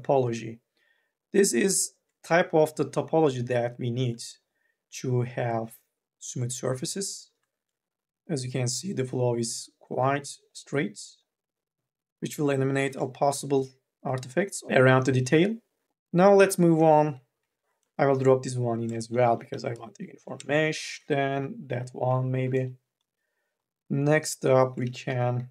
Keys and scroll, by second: 14.0 n, 14.6 a, 16.2 q, 17.2 k, 17.5 l, 19.3 3, 19.6 e, 21.1 k, 21.6 l, 22.0 q, 24.9 q, 25.3 2, 25.3 e.